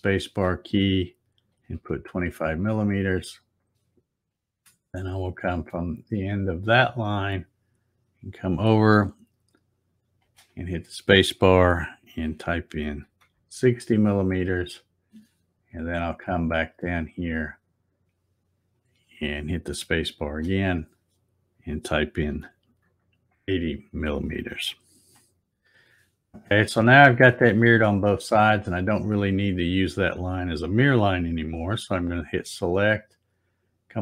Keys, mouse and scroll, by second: 7.0-10.7 drag, 10.3 space, 17.1-20.5 drag, 20.2 space, 32.1 click.